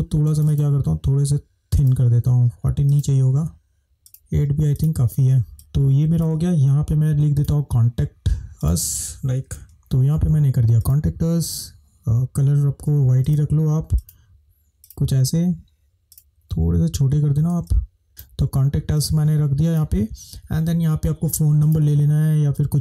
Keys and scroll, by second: 5.5 space, 18.0 Return.